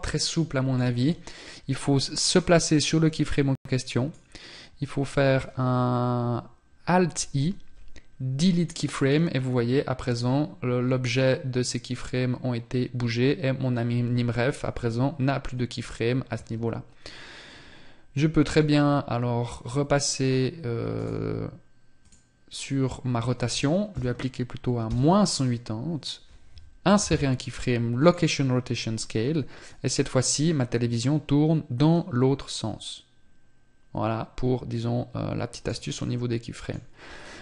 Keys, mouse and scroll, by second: 1.7 click, 26.1 i, 35.3 middle click, 36.4 scroll down 1.